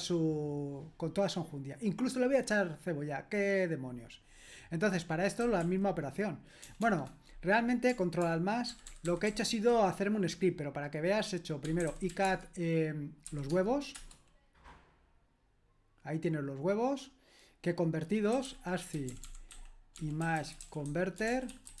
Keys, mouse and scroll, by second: 5.2-6.9 typing, 8.7 ctrl+alt++, 8.9 ctrl+alt++, 9.0 ctrl+alt++, 9.3 ctrl+alt++, 11.6-14.0 typing, 13.5 Tab, 18.1-21.8 typing.